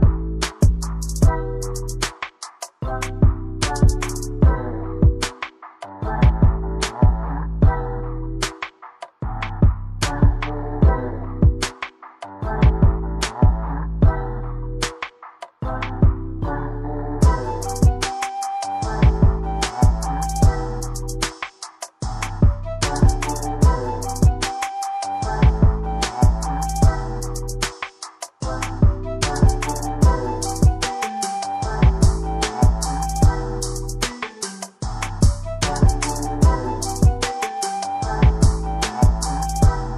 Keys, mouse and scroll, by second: 0.2 shift+scroll down 1, 1.9 click, 14.7 click, 15.5 click, 26.8 click, 27.0 typing, 28.5-30.7 typing, 31.8 Return, 32.2-34.1 typing, 35.2 click.